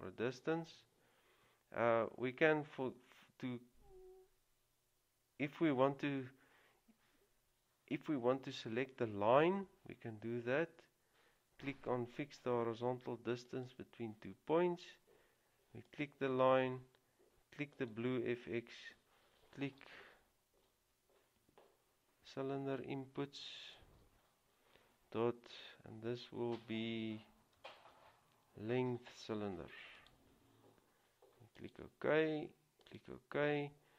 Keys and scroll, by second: 21.7 typing, 28.1 typing.